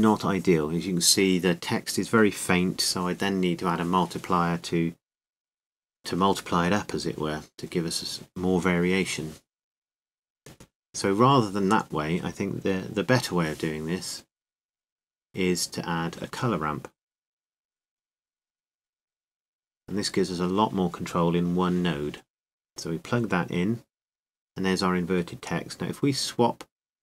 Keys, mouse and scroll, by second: 15.9 Delete, 20.5-25.1 drag, 25.6-27.0 drag.